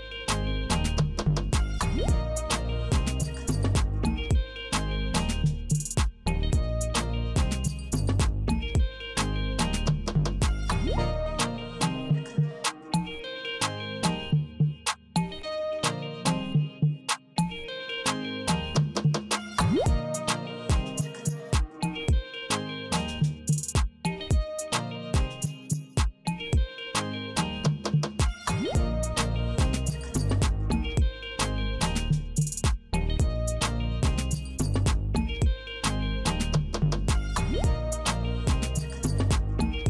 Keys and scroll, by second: 0.1 alt+F4, 5.8 Return, 9.1 space, 12.7 Return, 24.0 super+x, 33.2 super+Pause.